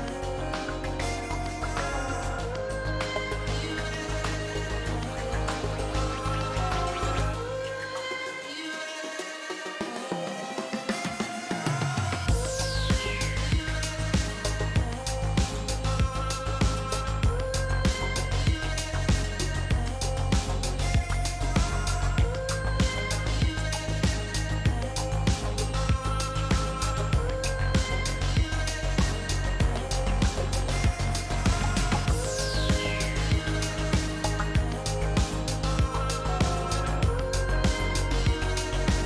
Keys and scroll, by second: 3.2 g, 7.3 s, 15.4 s, 15.5 r, 15.5 s, 18.1 Return, 26.0 p, 26.1 Return, 27.0 Delete, 27.2 i, 31.7 F2.